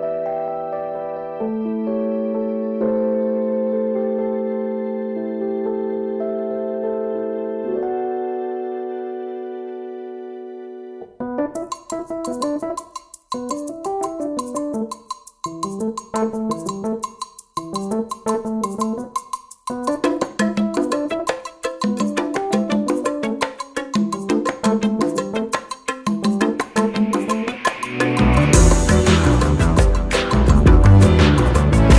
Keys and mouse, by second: 2.4 Down, 4.3-5.4 drag, 8.3-10.0 alt+drag, 21.0-22.3 drag, 27.9-28.4 drag.